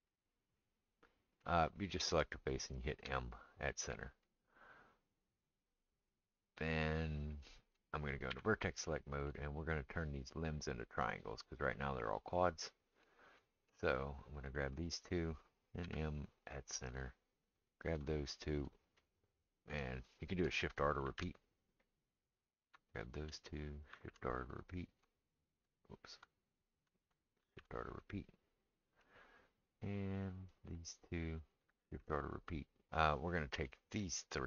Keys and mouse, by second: 0.6-14.7 middle drag, 2.1 click, 3.0 m, 8.3 1, 14.7 shift+click, 14.8-17.7 shift+middle drag, 15.8 m, 17.7 click, 17.7 shift+middle click, 18.4 click, 18.4-23.0 middle drag, 21.0 shift+r, 22.3 click, 23.0 shift+click, 23.0-25.3 shift+middle drag, 23.9 shift+r, 25.3 shift+click, 25.4 shift+middle click, 25.9 click, 25.9 shift+middle click, 26.6 click, 26.7-30.5 middle drag, 27.4 shift+r, 30.5 click, 30.5-34.4 shift+middle drag, 31.8 shift+r, 33.3 click, 34.4 click.